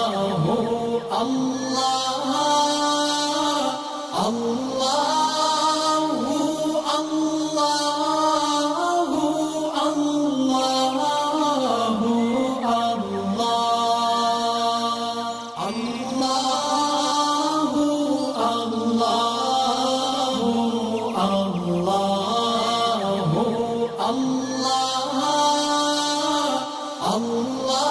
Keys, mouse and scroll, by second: 0.4-0.8 scroll up 2, 2.6 click, 2.9 space, 3.0 click, 5.8 space, 5.8 click, 9.8 space, 9.9 click, 10.6 space, 10.7 click, 12.0 alt+scroll down 1, 12.3 alt+scroll up 1, 13.2-14.1 drag, 14.4-15.0 alt+scroll up 2, 15.0 alt+scroll up 1, 15.7-16.8 alt+shift+drag, 16.9 space, 19.0 ctrl+z, 19.3 space, 19.4 click, 20.3-23.5 drag, 23.8-24.2 alt+scroll up 1, 25.0-26.5 alt+shift+click, 26.5 shift+space, 26.6 click.